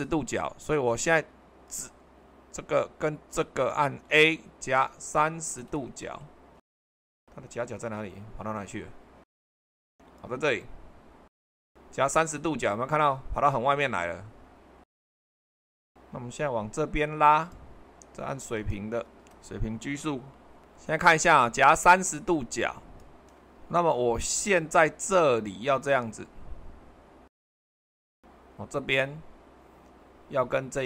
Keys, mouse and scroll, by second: 1.6-2.8 drag, 3.6-5.3 drag, 6.6 typing, 6.9 Return, 7.5-9.4 middle drag, 19.2 h, 29.4-30.8 middle drag.